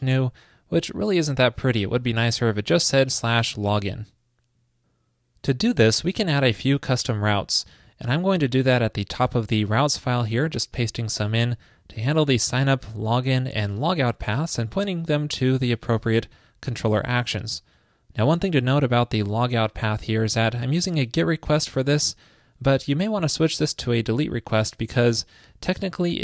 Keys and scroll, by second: 10.5 super+v.